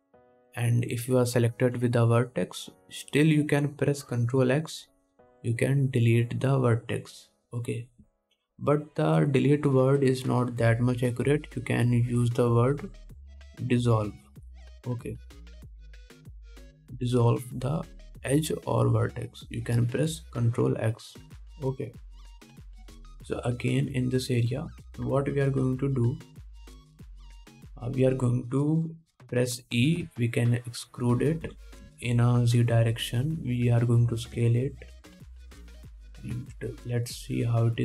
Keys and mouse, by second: 15.1-31.0 drag, 24.0 2, 24.8 alt+middle click, 24.8 alt+right click, 31.0 e, 32.7 g, 34.2-37.8 drag, 35.6 s, 37.6 ctrl+Tab.